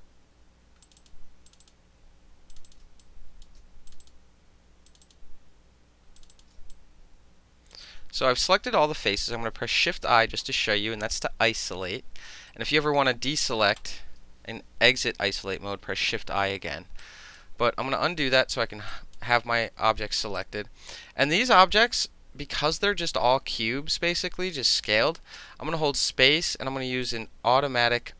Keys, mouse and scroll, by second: 0.8 shift+click, 1.5 shift+click, 1.6 shift+click, 1.7-2.5 shift+middle drag, 2.5 shift+click, 2.6-3.0 alt+shift+middle drag, 2.7 shift+click, 3.0 alt+click, 3.4 alt+middle click, 3.9 shift+click, 3.9 shift+middle click, 4.0 shift+click, 4.1-4.9 shift+middle drag, 4.9 shift+click, 5.0-6.2 shift+middle drag, 6.2 shift+click, 6.2 shift+middle click, 6.3 shift+click, 6.4 alt+shift+middle click, 6.7-7.7 alt+drag, 7.7 alt+middle click, 7.8-8.2 alt+drag, 9.8 shift+i, 11.5 alt+click, 12.5 alt+right click, 13.8 click, 16.0 shift+i, 17.0 alt+click, 17.5 ctrl+z, 17.8 ctrl+z, 18.2 ctrl+z, 18.9 alt+click, 19.1-20.4 alt+middle drag, 20.4-24.9 alt+drag, 24.9-25.3 alt+middle drag, 25.3 space, 27.0 click.